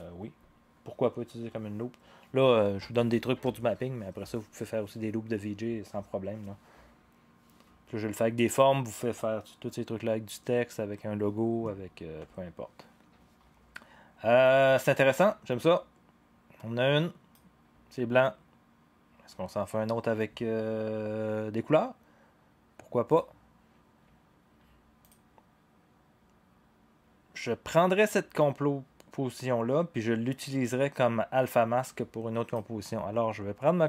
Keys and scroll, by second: 12.2 0.